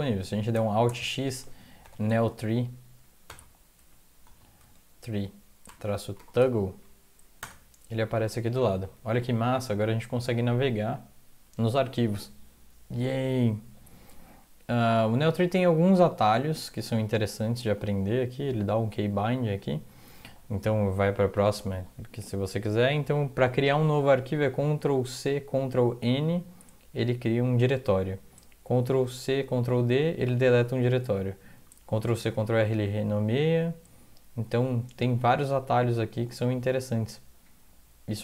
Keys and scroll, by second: 0.9 alt+x, 1.6-6.6 typing, 7.4 Return, 8.7 Down, 8.9 Down, 9.1 Down, 9.2 Down, 9.9 Up, 10.0 Up, 10.2 Up, 10.4 Up, 14.8 Down, 15.1 Down, 15.2 Down, 15.6 alt+Tab.